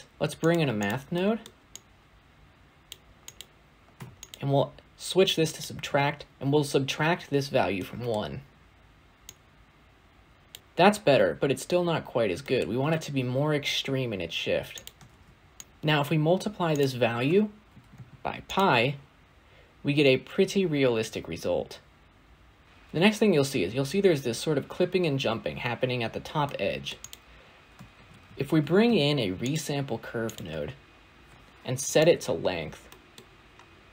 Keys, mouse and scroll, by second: 0.6 click, 1.0 middle click, 1.4 scroll up 2, 1.6 click, 3.2-4.2 drag, 5.3-7.7 drag, 7.7-9.1 middle drag, 9.1 drag, 10.6-11.6 middle drag, 11.6-12.3 scroll down 2, 12.3-14.1 middle drag, 14.1-14.6 scroll up 2, 14.6 click, 14.9 shift+d, 16.6-18.4 drag, 22.6-25.0 scroll down 1, 26.1 scroll up 1, 26.3 middle click, 26.9 click, 27.8 shift+a, 31.7-32.8 drag, 32.8 middle click, 33.1 scroll up 2, 33.3-33.9 scroll down 1.